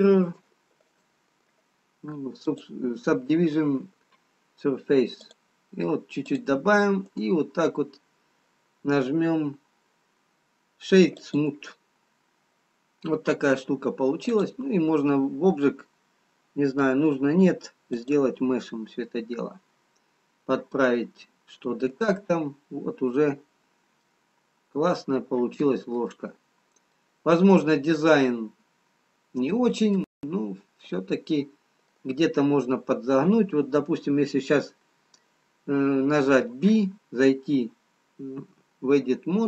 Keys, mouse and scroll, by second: 0.5 ctrl+z, 1.0 click, 5.3 click, 6.3 click, 7.3 right click, 12.0-13.3 scroll up 2, 13.6-15.1 scroll down 1, 18.9-19.8 scroll up 1, 20.6-21.9 scroll down 1, 21.9 Tab, 23.1-23.5 scroll up 4, 24.9 middle click, 24.9-26.5 scroll down 1, 26.5-27.1 scroll down 2, 28.1 middle click, 28.1-28.5 scroll down 2, 30.9-32.0 scroll up 2, 38.3 Tab, 39.0 Tab.